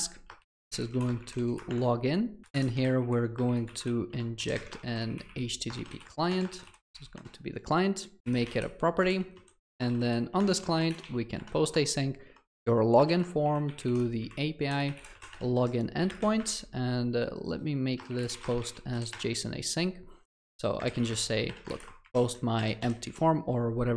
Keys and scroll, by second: 4.2 Return, 10.5 Return, 16.5 Escape, 19.9 Return.